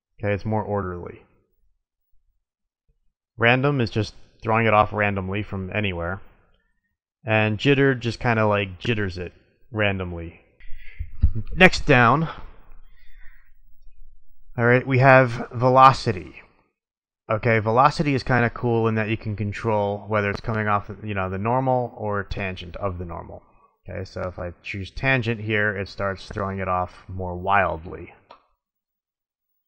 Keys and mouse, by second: 0.0 middle drag, 0.2 click, 1.8 middle click, 3.3-4.8 drag, 5.2-7.0 middle drag, 7.5-9.0 drag, 9.3-10.5 middle drag, 12.1-13.8 middle drag, 14.1-16.0 middle drag, 23.3-24.7 drag, 25.2-26.5 middle drag, 27.8 middle click, 28.9-29.6 drag.